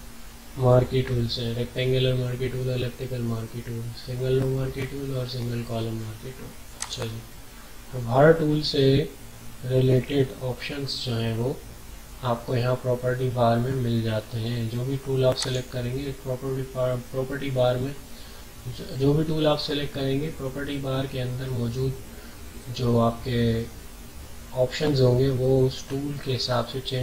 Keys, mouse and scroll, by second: 6.8 click, 15.4 click, 15.4 typing.